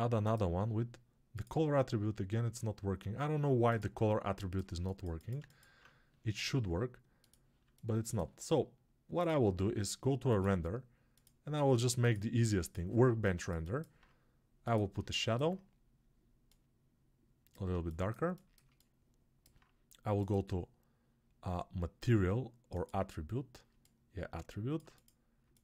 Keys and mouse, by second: 4.1-7.5 alt+drag, 4.1-25.6 alt+right drag, 13.0-14.9 alt+drag, 17.7-23.6 shift+drag.